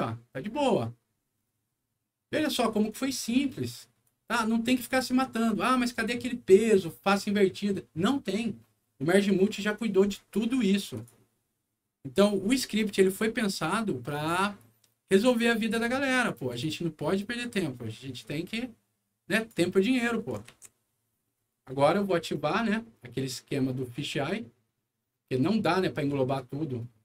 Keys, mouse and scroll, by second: 0.9 scroll down 1, 4.0 click, 10.9 click, 11.9 middle click, 12.3 scroll up 1, 13.1 middle click, 14.0-15.3 drag, 15.6 right click, 16.4 click, 17.5-19.4 drag, 20.0 middle click, 20.4 alt+w, 22.2 alt+click, 22.9 alt+right click, 23.7 click.